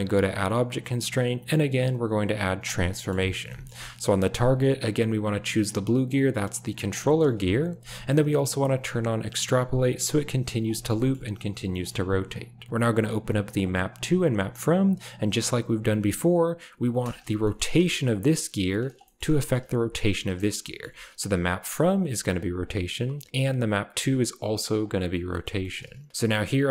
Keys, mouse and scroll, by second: 0.2-2.7 drag, 3.2 shift+middle click, 3.5 shift+middle click, 9.7 click, 10.7 shift+middle click, 10.9 middle drag, 11.6 middle click, 14.3 click, 17.0 click, 17.6 r, 18.9 shift+drag, 19.4 drag, 19.6 r, 20.6 shift+drag, 22.5 click, 24.7 click, 25.5 shift+middle click.